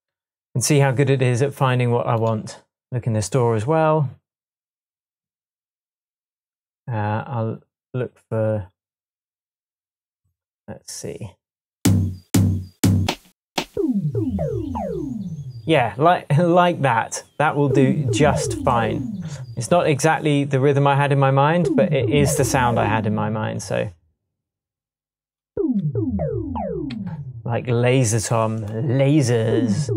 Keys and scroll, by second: 26.9 super+Tab.